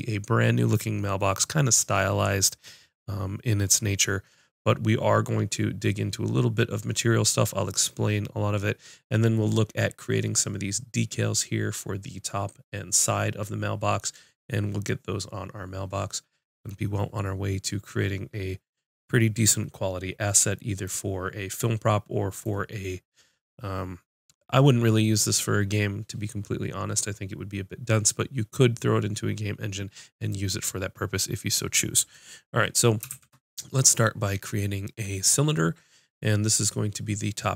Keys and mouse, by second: 33.1 shift+a.